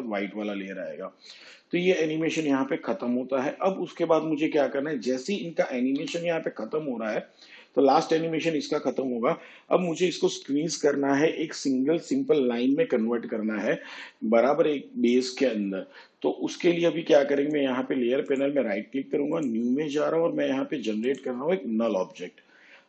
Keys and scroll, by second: 6.0 u.